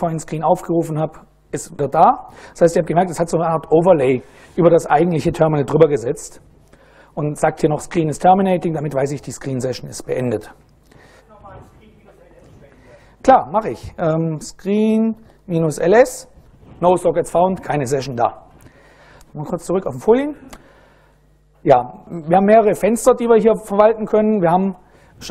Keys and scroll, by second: 13.9-15.9 typing.